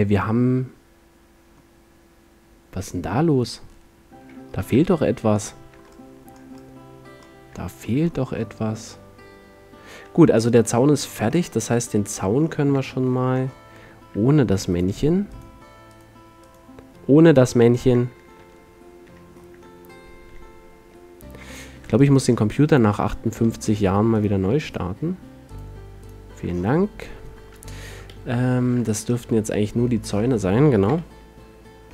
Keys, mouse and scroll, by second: 5.5 middle click, 6.4 middle click, 7.1 middle click, 10.5 middle click, 11.4-14.9 middle drag, 14.9-19.6 drag, 19.6 ctrl+z, 20.9 ctrl+z, 20.9-23.0 middle drag, 24.2-28.2 drag, 28.2 KP_1, 31.0 KP_1, 31.4-31.9 middle drag.